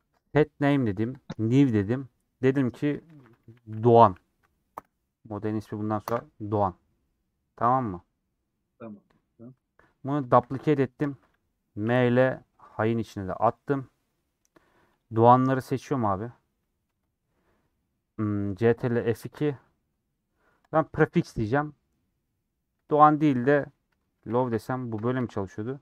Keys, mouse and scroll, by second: 20.5 ctrl+F2.